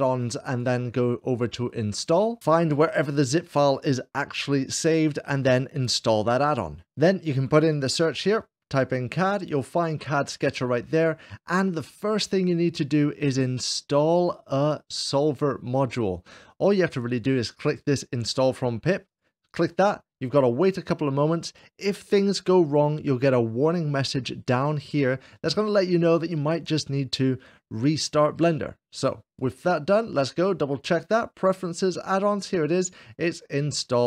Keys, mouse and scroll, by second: 0.0-1.1 drag, 6.2-7.8 drag, 7.8 c, 8.0 c, 8.1 d, 9.4-11.3 drag, 18.9-20.0 drag, 29.2-31.3 drag.